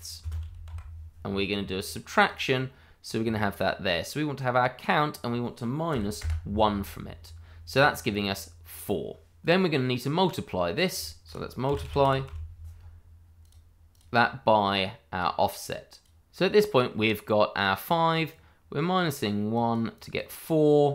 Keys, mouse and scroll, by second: 0.0-0.6 typing, 2.2 click, 5.9 1, 6.2 Return, 9.4 click, 11.6 m, 11.8 u, 12.0 l, 12.2 i, 13.4 click, 14.0 double click, 15.2 click, 18.6 click, 19.0 double click.